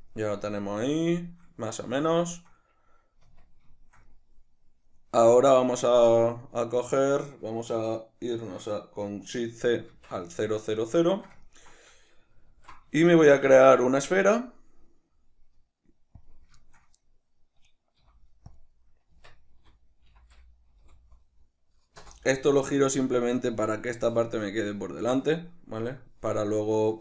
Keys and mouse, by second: 3.3 Tab, 9.9 shift+c, 11.0 shift+middle click, 12.6 alt+q, 13.0 shift+middle click, 13.6 shift+a, 16.6 shift+middle click, 18.0 z, 19.2 Tab, 19.8 r, 22.1 Return, 26.8 Tab.